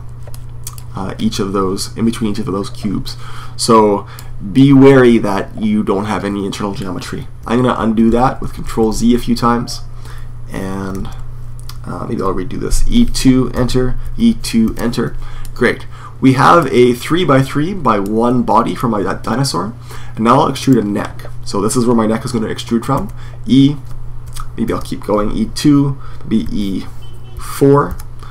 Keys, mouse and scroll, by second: 0.3-7.2 middle drag, 7.6 super+z, 7.9-8.4 super+z, 8.7 super+z, 10.8 z, 12.6 e, 13.8 e, 15.2-16.9 middle drag, 17.8-19.7 middle drag, 20.4-22.7 right drag, 22.7 e, 26.3 e.